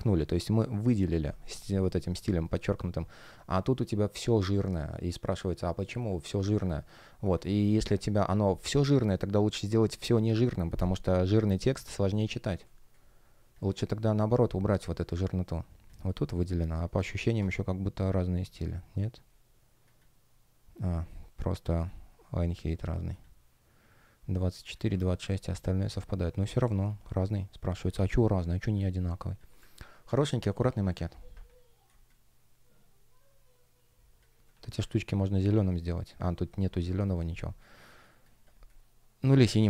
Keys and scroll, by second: 1.5-3.0 typing, 4.1 shift+g, 5.0 shift+o, 5.9 shift+g, 11.3 shift+g, 12.6 space, 25.4 space, 29.5 super+space, 31.8 space, 36.4 space.